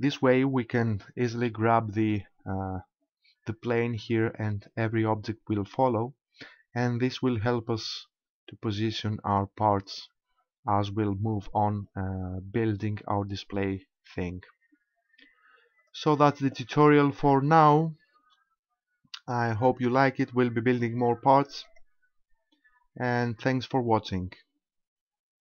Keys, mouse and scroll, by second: 1.5 g, 15.9 right click, 18.2 KP_0, 18.9-19.7 scroll up 1, 19.7 scroll down 1, 20.9 click, 21.7 click.